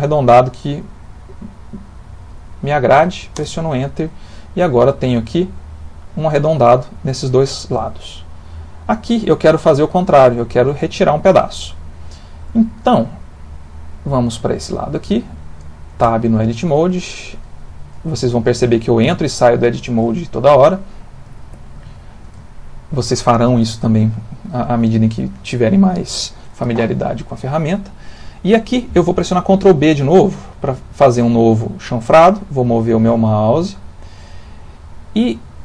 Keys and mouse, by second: 3.9 middle click, 4.7 Tab, 5.1 middle click, 6.2 middle click, 11.7 middle click, 11.9 middle click, 12.0 middle click, 12.7 middle click, 13.3 middle click, 14.0 middle click, 14.8 middle click, 16.0 Tab, 16.5 ctrl+middle click, 17.3 click, 19.5 shift+click, 20.9 middle click, 21.3 ctrl+middle click, 21.9 shift+middle click, 22.4 ctrl+middle click, 30.3 ctrl+b.